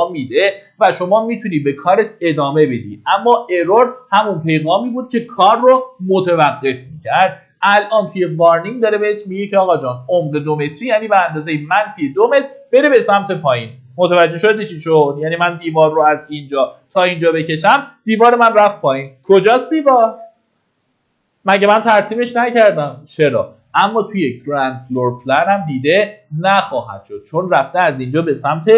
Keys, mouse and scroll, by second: 17.9 Escape, 25.3-26.3 drag.